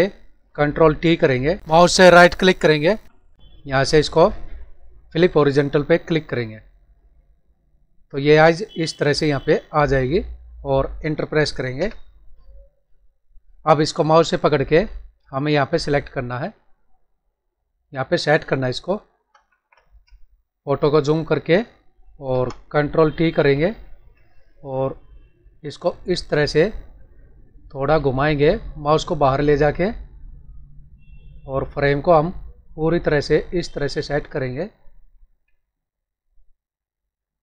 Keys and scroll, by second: 1.2 ctrl+t, 19.2 ctrl+=, 20.0 space, 23.5 ctrl+t, 32.4 Left, 35.4 Down, 36.7 Right, 37.2 Down.